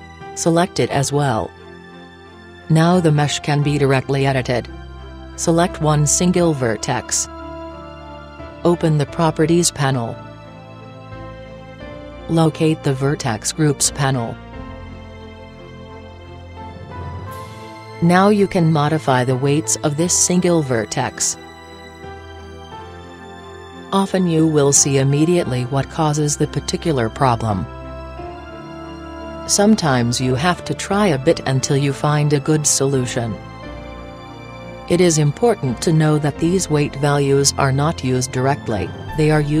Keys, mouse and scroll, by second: 1.2-3.1 drag, 2.2 middle click, 4.3-6.9 middle drag, 6.9-8.8 right drag, 10.6-13.9 drag, 18.1-19.8 drag, 23.6-25.4 drag, 26.8-28.5 middle drag, 28.4-29.3 right drag, 29.3 click, 29.3 right click, 30.0 click, 31.0 click, 33.4-35.1 right drag, 34.7-36.8 drag, 37.4-39.0 middle drag, 39.0 click, 39.0-39.6 right drag, 39.0 middle click.